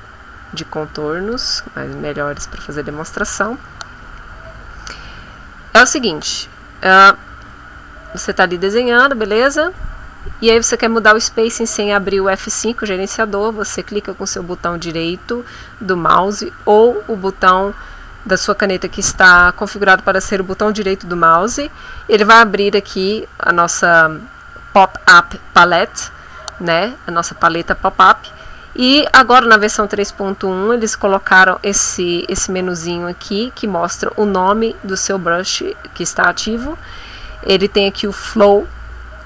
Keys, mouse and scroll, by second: 1.2 click, 1.9 shift+click, 3.2 shift+click, 7.4 click, 8.0-9.2 drag, 14.3 right click.